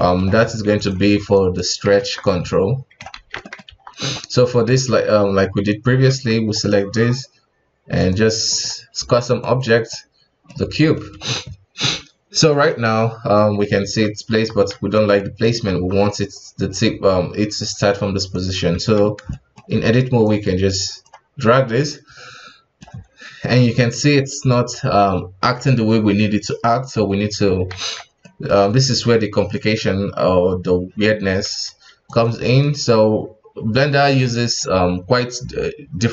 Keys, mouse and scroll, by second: 0.4 s, 1.3 right click, 1.9 ctrl+Tab, 2.2 right click, 3.2 ctrl+z, 3.4 middle click, 3.6 scroll up 1, 3.7 KP_1, 4.8 ctrl+Tab, 6.1 ctrl+Tab, 6.5 right click, 7.1-7.9 scroll down 2, 7.9 click, 8.5 click, 9.9-11.1 middle drag, 11.1 KP_1, 12.5 right click, 13.3-13.8 middle drag, 13.8 ctrl+Tab, 14.3 KP_1, 14.7 alt+a, 15.2-15.7 middle drag, 15.7 KP_1, 18.3 right click, 18.7 Tab, 19.3-20.2 shift+middle drag, 20.2-21.8 drag, 21.8-23.2 middle drag, 23.2-23.6 scroll up 1, 23.6-26.6 middle drag, 27.1-27.7 scroll down 2, 27.7 ctrl+z, 28.2-31.2 middle drag, 31.4 s, 32.4-35.5 middle drag.